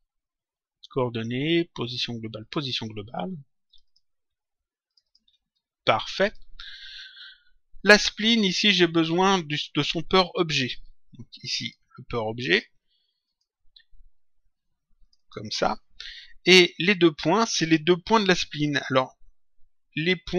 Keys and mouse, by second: 2.3 click, 3.6 ctrl+click, 11.5 click, 13.3 click, 14.9 click.